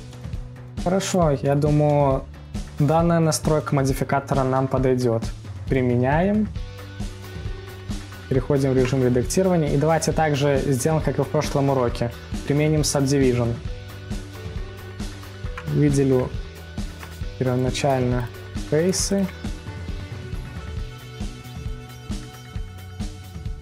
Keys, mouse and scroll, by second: 0.0-0.7 middle drag, 0.7-1.1 scroll down 4, 1.1-1.4 scroll up 1, 1.4-3.0 middle drag, 3.0-3.5 scroll down 2, 3.5-4.0 scroll up 2, 4.0-4.6 middle drag, 4.5 scroll, 4.6 scroll down 3, 4.9-5.9 scroll up 3, 5.9-8.2 drag, 9.2 Tab, 15.1 click, 17.5 click, 17.9 middle click, 18.5 ctrl+click, 18.8 middle click, 19.4 ctrl+click, 19.7 middle click, 20.5 ctrl+click, 20.8 middle click, 21.6 ctrl+click, 22.0-23.6 middle drag.